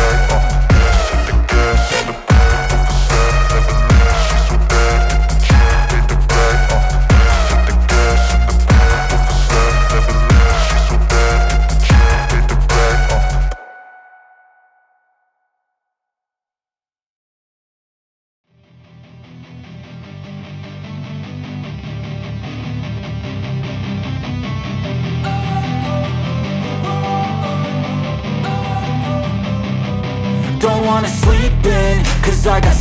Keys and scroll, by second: 1.1 ctrl+c, 1.9 ctrl+v, 3.8 ctrl+z, 6.4 ctrl+c, 8.4 ctrl+c, 12.6-14.0 typing, 17.6 BackSpace, 18.5 shift+., 19.1 =, 22.6 KP_Subtract, 22.8 ctrl+s, 31.2 KP_Subtract.